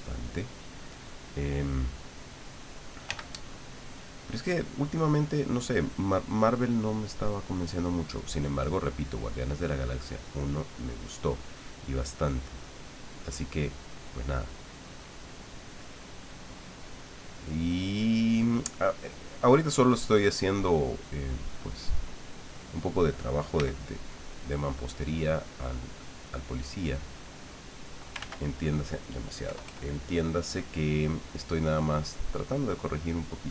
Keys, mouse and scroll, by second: 0.9 click, 1.7 click, 3.0 f, 3.8 click, 6.2 click, 8.0-11.2 drag, 11.9-13.1 drag, 14.2-15.3 drag, 15.4-17.0 drag, 17.2-19.5 drag, 19.5 middle click, 20.4 click, 21.0-23.5 middle drag, 23.5 f, 24.3 click, 25.0 click, 26.2 middle click, 27.1 middle click, 28.2 ctrl+z, 29.4 KP_Add, 30.1 click, 31.8-32.9 drag, 33.2 click.